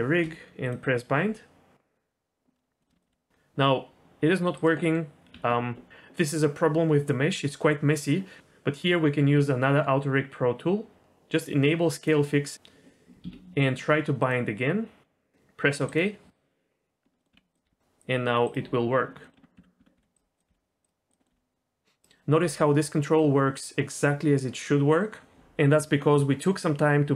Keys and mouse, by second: 2.8 shift+middle drag, 3.1 g, 4.8 middle click, 5.2 Tab, 11.9-13.2 drag, 14.2-16.5 drag, 17.2 middle click, 17.3 Tab, 17.5 click, 17.6 g, 19.2 middle click, 19.3 Tab, 19.5-22.4 typing, 19.8 Tab, 21.1 click, 21.2 middle click.